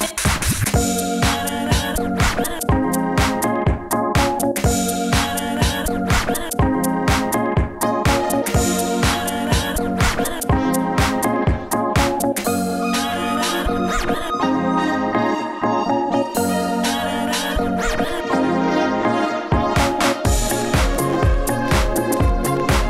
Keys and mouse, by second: 0.4 s, 2.4 s, 2.9 f, 3.2 n, 3.3 t, 3.6 drag, 4.3 f, 4.8 Tab, 4.9 Tab, 4.9 click, 5.1 f, 5.5 Tab, 5.7 Tab, 5.9 f, 6.2 f, 6.5 click, 6.5 Tab, 6.7 Tab, 8.1 Tab, 8.7 Tab, 9.6-10.8 Tab, 11.9-13.2 Tab, 13.9 Tab, 15.0 Tab, 15.0 s, 15.0 f, 17.9 s, 18.9-22.8 typing.